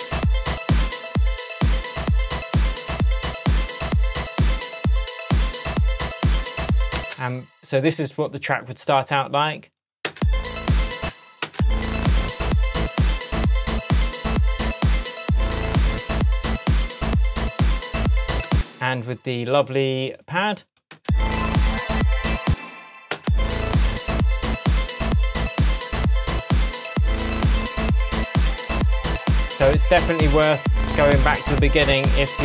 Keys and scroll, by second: 7.0 space, 10.1 space, 18.5 space, 21.0 space, 22.4 space.